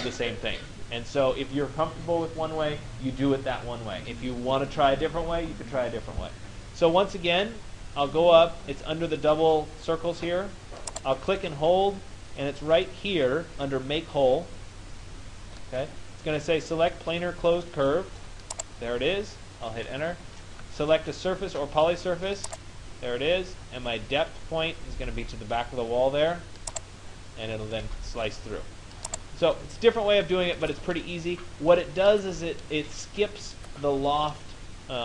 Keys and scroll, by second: 19.6 Return.